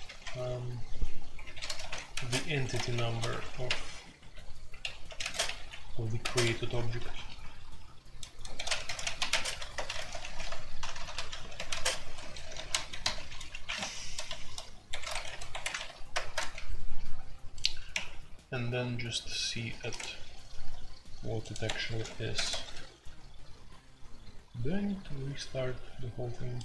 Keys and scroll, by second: 0.0-7.4 typing, 8.5-15.7 typing, 14.9 Escape, 17.9 q, 19.6-20.4 typing, 21.6 Escape, 21.8 F2, 22.3 ctrl+c, 22.5 ctrl+c.